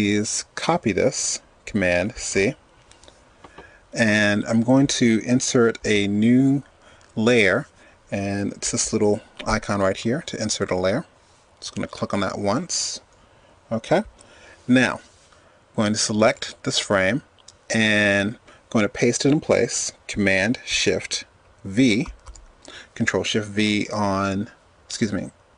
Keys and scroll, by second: 2.0 super+c, 20.9 shift+super+v.